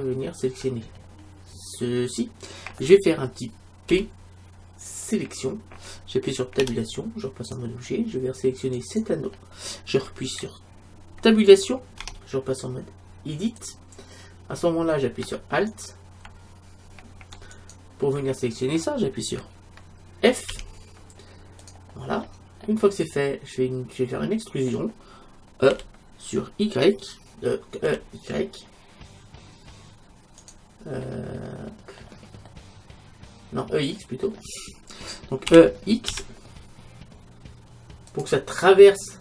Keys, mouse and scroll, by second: 3.9 p, 6.6 Tab, 8.8-10.6 right drag, 12.1 Tab, 15.7-17.4 right drag, 17.6-19.2 right drag, 20.5 f, 21.6-22.8 drag, 22.8 middle click, 23.3 click, 23.5-24.6 middle drag, 25.7 e, 31.1-34.4 middle drag, 35.5 e, 38.6 click.